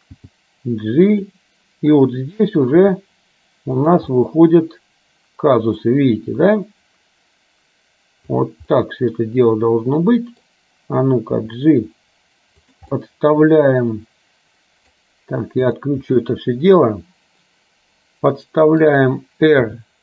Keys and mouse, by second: 0.3 g, 2.8 r, 4.2-5.9 middle drag, 6.3 r, 8.9-10.5 middle drag, 11.4 g, 13.0-15.0 middle drag, 15.8 click, 16.4-18.9 middle drag, 19.8 r.